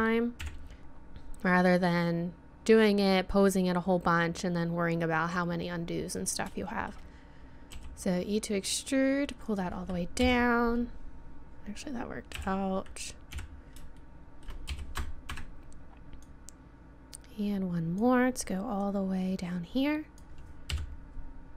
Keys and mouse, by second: 0.4 KP_1, 2.7-6.7 middle drag, 7.7 e, 10.2 KP_3, 12.4 KP_7, 13.3 KP_1, 14.7 e, 16.2 click, 18.8-20.6 drag, 20.7 KP_3.